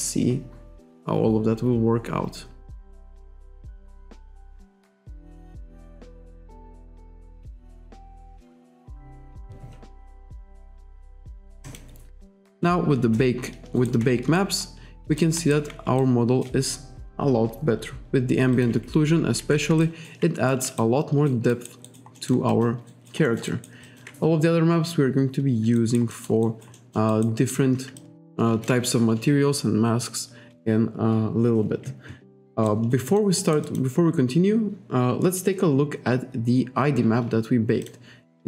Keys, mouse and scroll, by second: 11.7 click, 13.2 alt+right click, 13.8 alt+right click, 14.4 shift+right click, 15.4 alt+right click, 16.0 shift+right click, 17.5-18.0 scroll down 1, 18.6 click, 19.4 ctrl+z, 19.9 alt+right click, 20.5 alt+right click, 20.8 shift+right click, 21.6 alt+right click, 21.9 alt+right click, 22.2 alt+middle click, 22.5 alt+click, 22.9 alt+right click, 23.3 alt+middle click, 23.5 alt+right click, 23.9 alt+click, 25.8 alt+right click, 26.4 alt+scroll down 1, 26.5 alt+right click, 28.0 alt+click, 32.7 alt+right click, 33.1 alt+middle click, 33.4 alt+right click, 37.9 click.